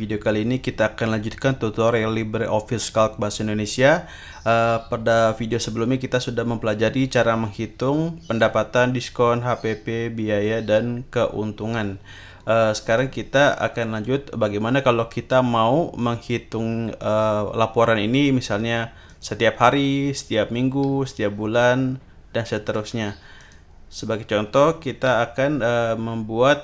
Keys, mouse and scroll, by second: 8.3 click, 12.9 click, 19.1 click, 22.7 click, 23.4 click.